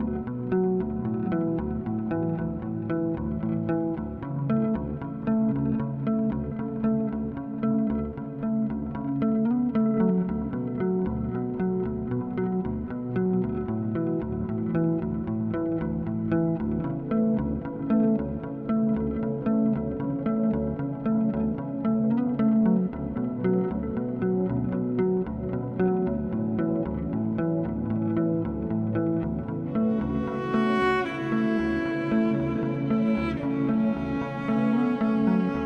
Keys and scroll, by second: 3.3 ctrl+z, 5.7 ctrl+z, 6.3 ctrl+z, 6.6 ctrl+z, 7.5 ctrl+z, 10.3 ctrl+z, 11.3 ctrl+z, 12.0 ctrl+z, 12.6 ctrl+z, 14.7 ctrl+-, 15.2 ctrl+z, 17.2 1, 17.5 ctrl+=, 18.3 typing, 19.6 ctrl+=, 25.8 ctrl+z, 26.5 ctrl+z, 27.3 ctrl+z, 29.8 ctrl+z, 31.6 z, 32.6 ctrl+z, 32.7 ctrl+=, 33.9 z.